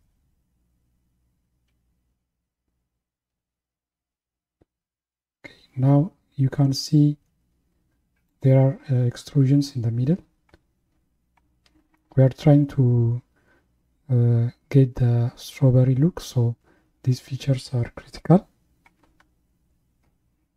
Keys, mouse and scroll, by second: 1.0-1.4 scroll up 2, 1.8 s.